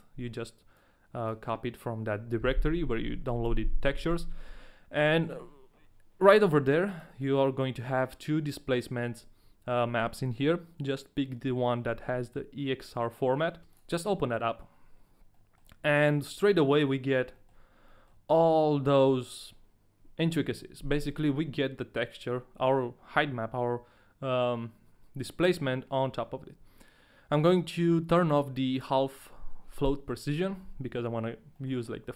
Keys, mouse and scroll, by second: 15.3 middle click, 16.1 shift+middle click, 16.3 middle click, 17.5 shift+middle click, 17.6 scroll down 1, 17.9 middle click, 18.3 scroll up 1, 18.6 middle click, 21.2 scroll down 1, 25.6 middle click, 29.3 click, 31.5 middle click.